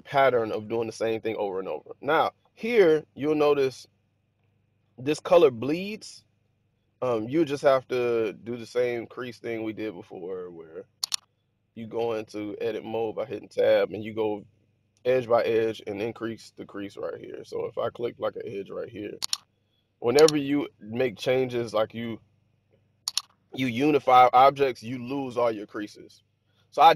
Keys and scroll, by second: 11.7 Tab.